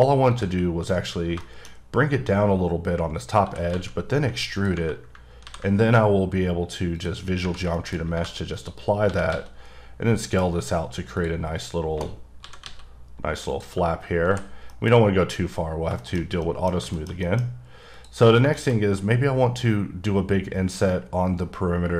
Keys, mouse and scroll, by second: 0.3 click, 0.8-1.3 scroll up 2, 1.4 shift+middle click, 3.0 scroll up 2, 3.4 e, 3.7 z, 4.5 click, 5.1 Tab, 5.4 ctrl+a, 6.9 click, 7.4 Tab, 7.7 shift+middle click, 8.2 3, 8.5 click, 9.1 s, 9.3 x, 11.1 click, 12.1 scroll down 3, 12.4 s, 12.6 x, 13.5 click, 13.7 Right, 13.9-14.2 scroll down 1, 14.3 h, 14.5 scroll down 1, 14.7 middle click, 14.9-15.8 scroll up 3, 15.8 shift+scroll down 1, 16.0 shift+middle click, 17.5-17.9 scroll up 1, 17.9 click, 18.5 shift+middle click.